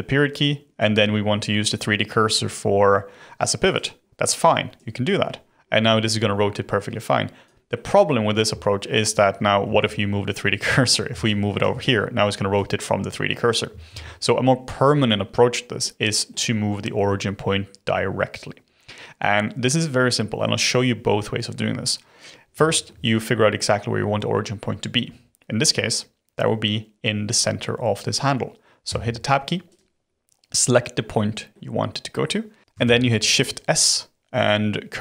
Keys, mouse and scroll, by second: 4.7 click, 7.7-9.6 middle drag, 9.6 ctrl+z, 10.8-11.2 middle drag, 11.2-12.5 shift+right drag, 12.5 click, 13.9 ctrl+z, 15.8-18.6 middle drag, 18.6-18.9 scroll up 2, 21.6-22.0 scroll up 2, 22.2 scroll down 2, 22.6-25.6 shift+middle drag, 28.8 Tab, 29.6 click, 31.5-32.7 middle drag, 32.8 shift+s.